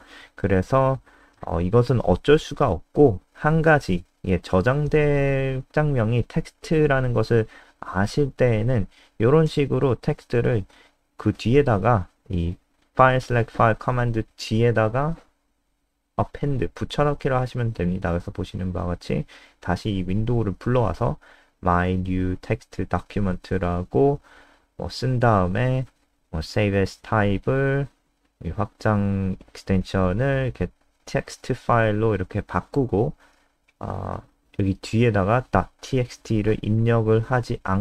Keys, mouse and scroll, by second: 4.1 ctrl+c, 4.3 click, 5.4 shift+Home, 5.7 shift+Up, 6.6 ctrl+v, 11.7 click, 17.2 ctrl+s, 17.6 F5, 22.1-28.5 typing, 30.0 click.